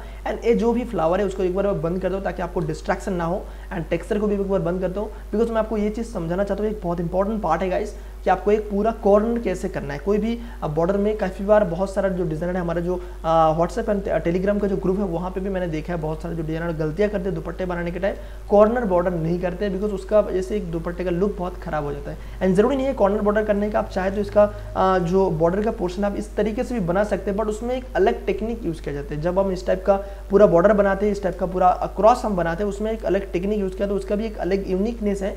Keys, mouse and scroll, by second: 5.3 space, 5.4 click, 5.8 space, 6.1 space, 6.4-7.8 ctrl+drag, 9.9 space, 10.2-16.1 ctrl+drag, 16.1 space, 16.6-20.0 ctrl+drag, 23.6 alt+click, 24.5 ctrl+t, 24.9 ctrl+right click, 25.9-31.4 drag, 31.4 space, 31.6-35.3 ctrl+drag.